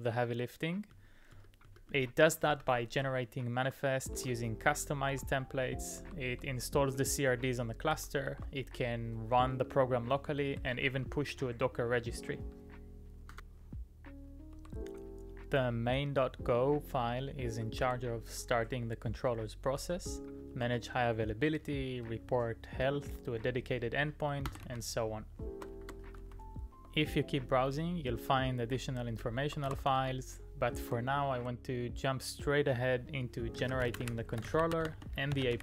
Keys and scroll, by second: 0.9 Up, 1.3 Up, 1.6 Up, 1.9 Up, 2.5 Down, 2.9 Return, 4.1 ctrl+d, 5.1 ctrl+d, 6.0 ctrl+d, 10.6 g, 10.8 g, 14.4 ctrl+d, 14.6 ctrl+d, 24.3-26.7 typing, 29.7 ctrl+c, 31.3 shift+z.